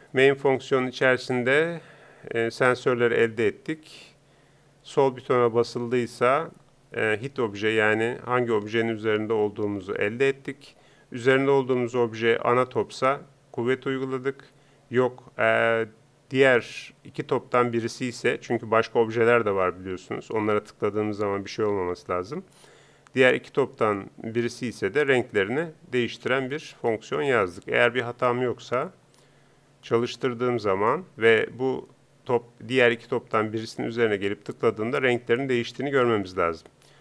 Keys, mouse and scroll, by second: 29.0-30.5 drag.